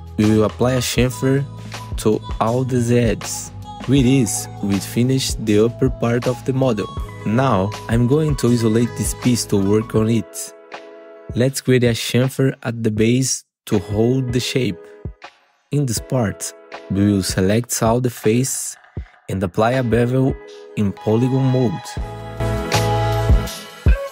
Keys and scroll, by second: 1.1 ctrl+shift+c, 4.8 2, 5.0 F4, 5.2 2, 6.1 alt+q, 6.8 F4, 7.3 2, 8.6 ctrl+shift+c, 11.5 2, 11.6 F4, 13.3 2, 14.2 4.